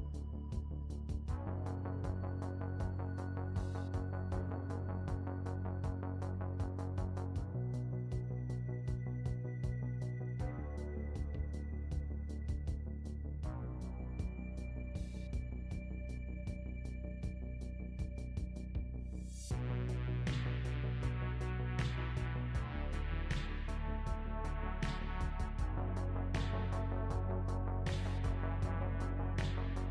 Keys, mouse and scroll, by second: 1.2-1.5 scroll down 3, 1.8 middle click, 2.7 scroll down 1, 3.1 middle click, 4.3 s, 8.4 s, 11.0 middle click, 12.2 g, 14.3 s, 16.3 g, 18.6 middle click, 20.0 KP_Decimal, 21.0 middle click, 22.5-23.0 scroll down 2, 23.0 middle click, 23.4 scroll down 1, 23.6 right click, 24.4 Tab, 24.9 3, 25.3 click, 25.5 middle click, 25.9 e, 26.5 g, 27.7 middle click, 27.9 s, 28.3 middle click, 28.6 s, 29.0 g, 29.5 middle click.